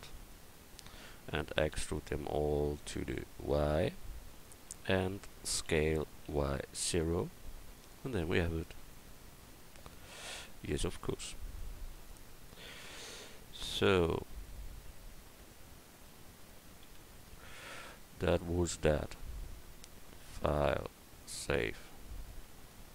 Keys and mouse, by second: 0.3-1.7 middle drag, 1.7 e, 3.1-5.7 drag, 5.7 s, 8.9-11.6 drag, 10.4 Tab, 13.6-16.5 middle drag, 16.8 a, 20.4-22.4 drag.